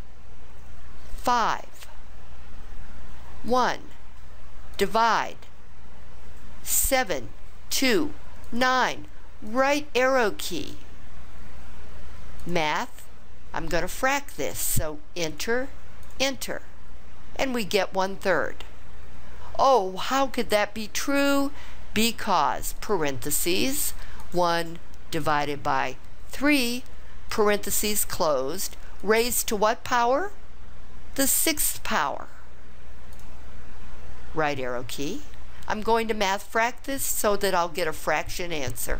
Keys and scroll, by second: 1.2 5, 3.5 1, 6.9 7, 7.8 2, 8.5 9, 9.5 ), 15.3 Return, 16.0 Return, 22.8 (, 24.2 1, 26.4 3, 27.3 ), 29.0 ^, 33.1 6, 34.5 ).